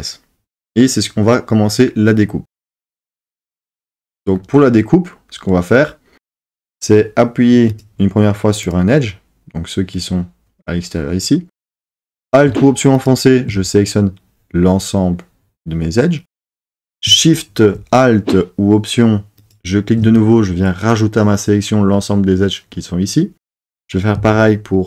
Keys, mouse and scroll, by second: 7.7 click.